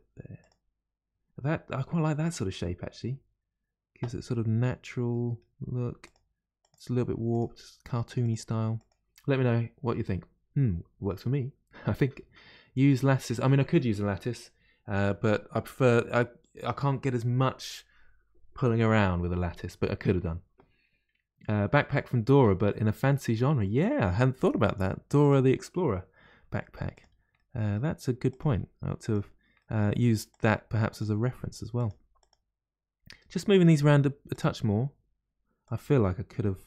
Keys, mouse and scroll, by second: 4.3-5.7 middle drag, 5.7 g, 6.6 click, 6.8 g, 8.2 click, 8.3 g, 24.3 middle click, 25.2 click, 26.3 g, 27.3 middle click, 28.3 click, 28.4 g, 29.5 middle click, 30.3 click, 30.5 g, 31.7 click, 31.9 g, 33.1-34.3 middle drag, 34.3 click, 34.5 g, 34.7 g, 36.4-36.6 middle drag.